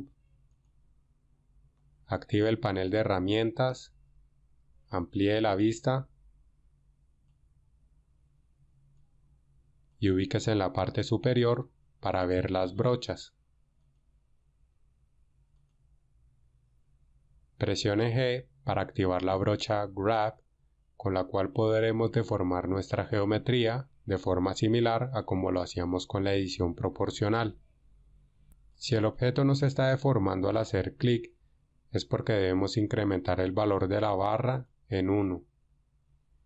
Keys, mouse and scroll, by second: 3.4 t, 13.8-15.0 drag, 15.6-16.7 drag, 18.1 g, 28.6-29.4 drag.